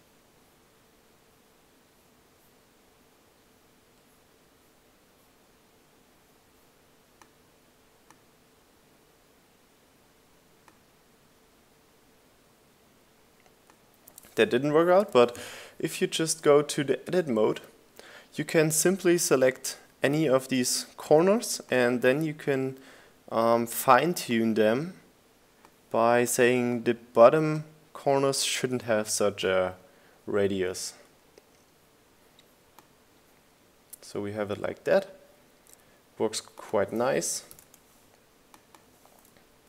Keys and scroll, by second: 0.7 Up, 16.3 BackSpace, 16.6 3, 16.7 Return, 39.3 shift+g, 39.4 Return.